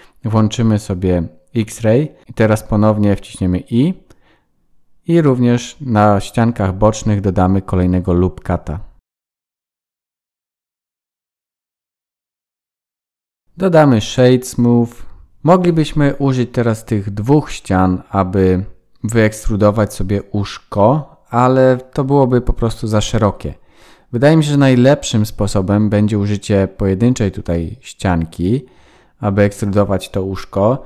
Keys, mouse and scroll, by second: 5.4 click, 6.0 shift+middle click, 8.7 ctrl+r, 12.9 Tab, 13.7 right click, 14.8 middle click, 15.3 click, 15.4 3, 15.7 click, 16.2 shift+click, 17.3 middle click, 20.5 middle click, 24.5-26.1 scroll down 3, 29.2-30.8 scroll up 3.